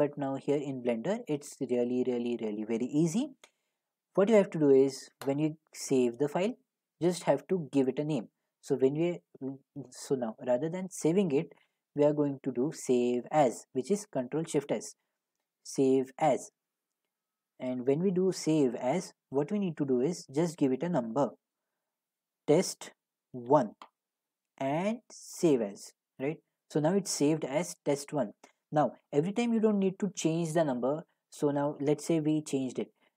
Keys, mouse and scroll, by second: 5.3 click, 14.6 click, 16.1 click, 17.7 click, 20.5 click, 21.2 click, 21.6 click, 22.9 Right, 23.5 1, 25.3 click, 26.2 click, 32.2 click, 32.7 a.